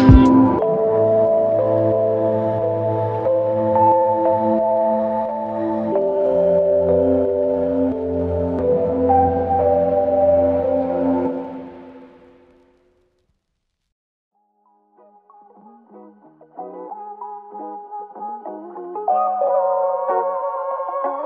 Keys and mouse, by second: 4.0 alt+click, 7.4 alt+click, 12.8 alt+click, 14.4 alt+click, 17.8 alt+click, 19.1 ctrl+click.